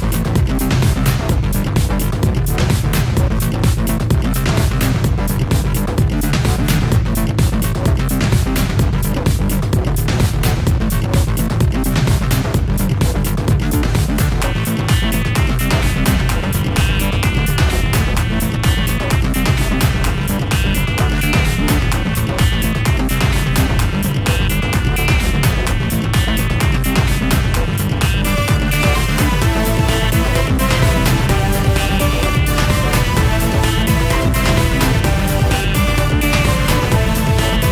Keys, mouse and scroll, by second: 1.4 click, 1.9 ctrl+d, 2.3 click, 4.5 click, 6.5 click, 10.0 click, 13.2 click, 13.8 click, 13.9 click, 14.7 click, 15.2 ctrl+c, 16.6 ctrl+v, 17.8 click, 18.3 click, 18.3 click, 19.5 ctrl+c, 20.6 click, 21.2 ctrl+v, 22.1 click, 24.5 click, 26.0 click, 27.4 click, 28.3 click, 29.3 click, 30.0 click, 30.0 click, 32.3 click, 32.9 click.